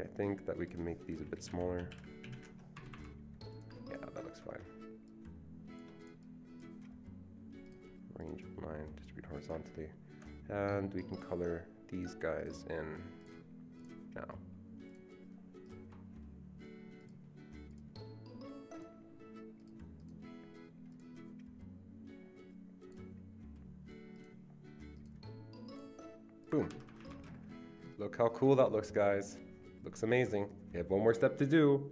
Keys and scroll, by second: 1.5 shift+Down, 1.5 Left, 2.2 shift+Down, 2.2 shift+Left, 2.3 shift+Left, 2.8 Escape, 3.0 Escape, 26.7 Escape, 26.9 Escape, 27.0 Escape.